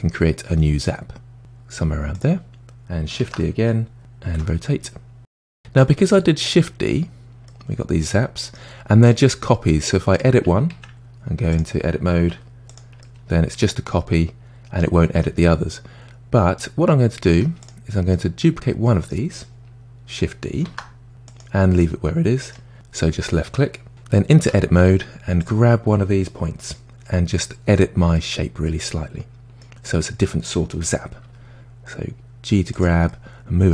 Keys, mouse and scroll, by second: 3.2 shift+d, 5.8-6.9 middle drag, 6.9-7.5 scroll down 1, 7.5-10.1 middle drag, 10.1 click, 10.7 Tab, 11.5 click, 12.3 g, 13.0-16.0 middle drag, 16.3-17.3 scroll up 1, 17.3 Tab, 17.6 click, 18.1-20.5 middle drag, 20.7 shift+d, 21.8 middle click, 22.5-24.0 scroll up 1, 24.4 Tab, 25.4 click, 28.1-31.2 middle drag, 33.1-33.7 middle drag.